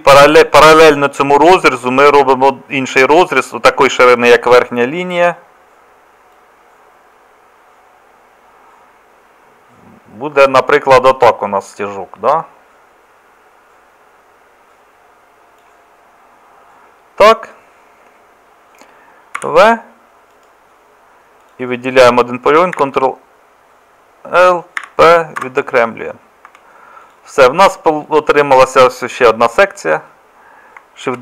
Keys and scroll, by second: 19.4 v, 22.8 ctrl+l, 24.8 p, 26.5 Tab, 31.1 shift+d.